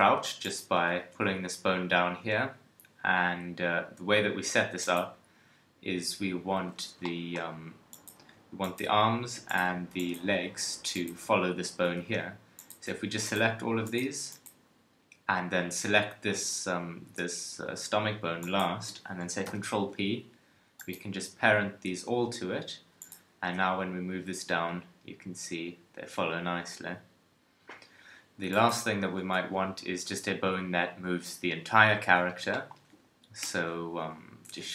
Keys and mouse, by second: 0.6 KP_1, 1.0 g, 6.6 Tab, 10.6 Tab, 11.8 Tab, 18.4-20.9 drag, 19.4 ctrl+p, 22.1 Tab, 22.6 KP_1, 23.4 g, 28.7 middle click, 29.3 KP_3, 33.4 Tab, 34.4 shift+a.